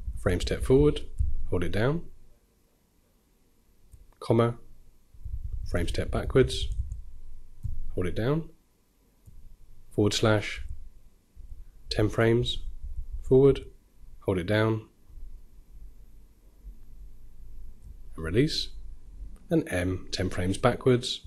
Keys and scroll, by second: 10.0-10.8 typing.